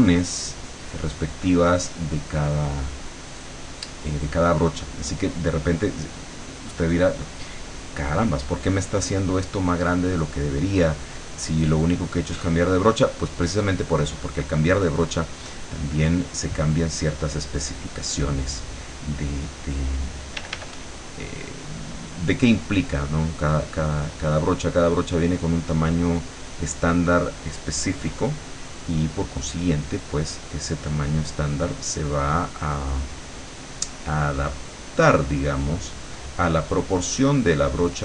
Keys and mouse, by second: 2.5 click, 3.3-4.7 drag, 8.8 click, 10.2-13.6 drag, 14.1-19.6 drag, 20.4 d, 21.3-25.2 drag, 26.4-29.4 drag, 30.5-32.6 drag, 33.5 click, 34.4-38.0 drag.